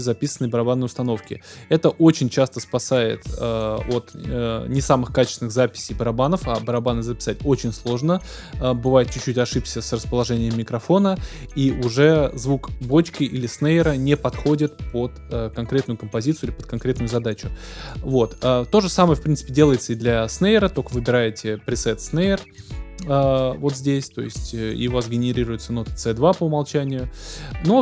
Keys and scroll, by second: 22.5 ctrl+d.